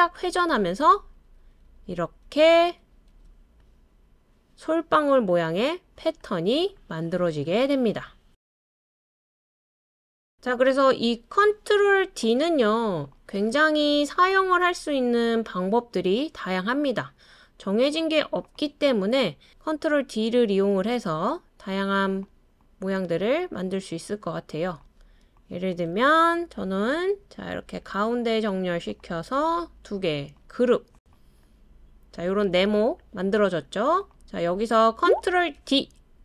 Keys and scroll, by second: 0.6 super+d, 0.8 super+d, 1.1 super+d, 18.9 super+d, 27.7 |, 35.6 super+d.